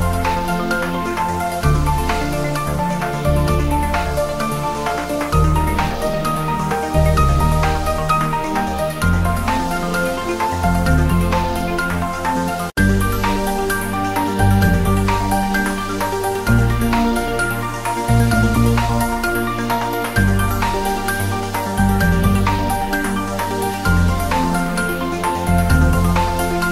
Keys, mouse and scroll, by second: 0.9-1.5 drag, 4.8-5.4 scroll up 1, 5.4 click, 6.5 scroll down 1, 6.9 click, 7.8 scroll down 1, 9.4-10.2 drag, 10.7 Tab, 12.9-13.6 drag, 16.0-16.6 scroll up 1, 16.9 click, 17.5-17.8 scroll down 1, 18.8 click, 19.4-19.7 scroll down 1, 22.0 click, 22.2-22.8 scroll down 1, 22.9 shift+a, 24.1 click, 24.4-25.4 typing, 24.4 scroll down 1, 25.1 click, 26.5 click.